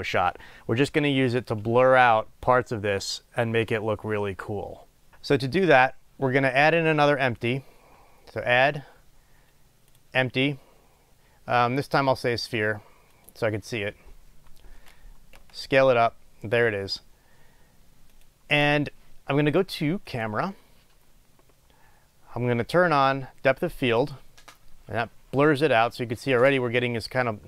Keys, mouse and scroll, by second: 4.1-10.3 middle drag, 12.0-12.5 middle drag, 13.5-18.5 drag, 15.6 s, 24.2 click.